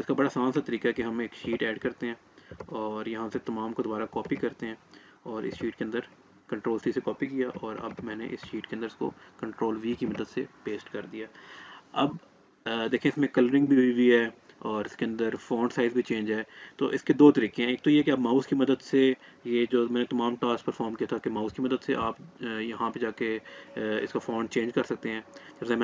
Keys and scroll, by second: 3.8 ctrl+c, 9.7 ctrl+v.